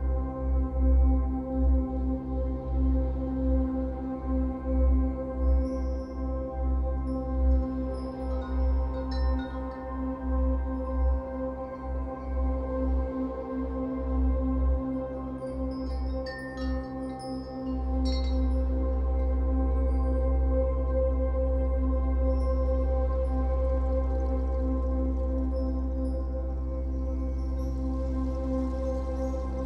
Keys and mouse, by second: 0.0-1.0 typing, 0.2 click, 0.9 click, 2.0 typing, 2.4-2.9 drag, 3.3 click, 4.6 typing, 4.9 click, 5.8 shift+click, 7.0 typing, 7.3 shift+click, 8.0 shift+click, 9.2 typing, 9.5 click, 10.4 click, 10.5 shift+click, 10.7 click, 11.5 typing, 11.8-13.3 drag, 13.6 typing, 14.0 click, 14.6 shift+click, 15.7 typing, 16.0-17.6 drag, 17.8 typing, 18.1-19.6 drag, 20.0 g, 20.2 1, 20.3-21.8 drag, 23.0-25.1 drag, 23.5 typing, 25.1-25.7 typing, 25.5 click, 28.0-29.6 typing, 28.6-29.6 drag.